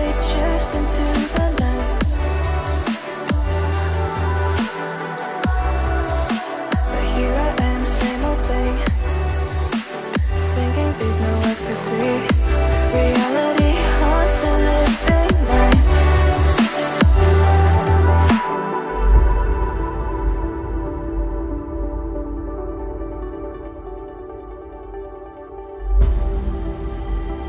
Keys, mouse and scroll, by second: 2.3 right click.